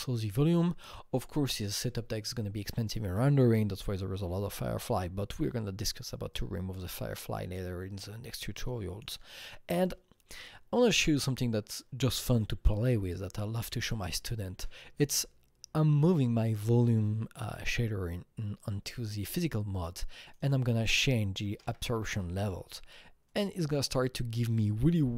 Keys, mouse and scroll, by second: 0.1-0.9 scroll down 5, 0.9-2.7 scroll up 1, 6.3-13.0 drag, 6.3 scroll down 1, 11.1 scroll, 11.2-12.3 scroll down 1, 13.0 click, 13.8 click, 14.6 scroll down 1, 20.3-21.5 drag, 20.4-21.5 scroll down 1, 21.5 KP_0, 21.7 KP_Decimal, 21.9 KP_5, 22.1 KP_Enter, 23.3 click.